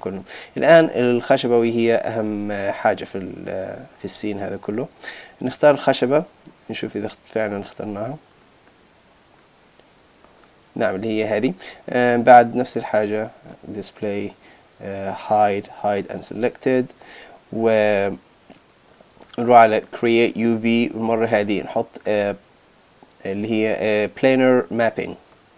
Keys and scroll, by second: 11.0 super+z.